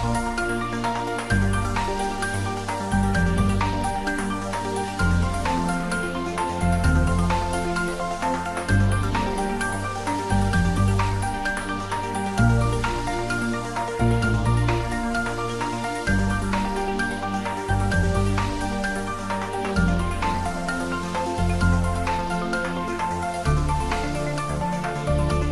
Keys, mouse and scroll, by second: 0.6-1.4 scroll down 1, 1.4-25.5 middle drag.